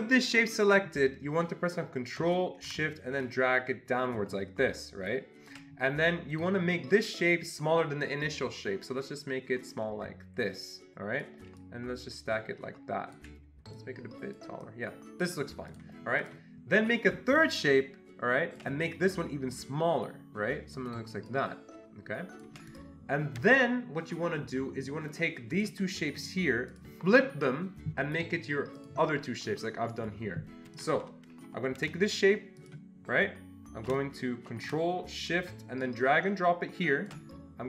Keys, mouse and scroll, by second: 1.7 click, 2.2 ctrl+z, 2.2 click, 3.3-8.1 ctrl+shift+drag, 9.2-13.7 ctrl+shift+drag, 13.7-15.7 shift+drag, 15.7 click, 16.2-17.4 drag, 17.4-25.4 ctrl+shift+drag, 25.5 shift+click, 26.7 click, 28.8 click, 32.6 click, 35.8-37.6 ctrl+shift+drag.